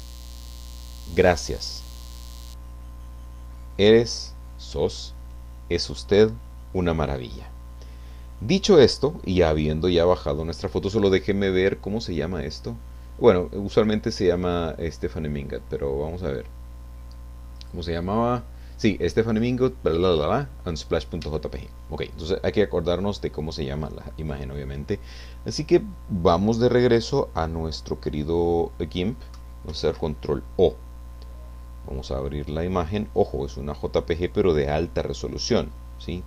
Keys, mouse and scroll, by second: 17.6 click, 21.3 Escape, 24.2 click, 29.7 ctrl+o, 32.0 click.